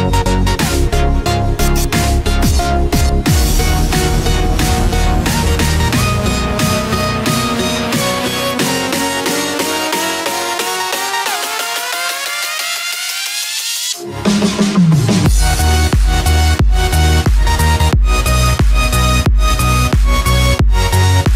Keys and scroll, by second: 15.8 ctrl+z.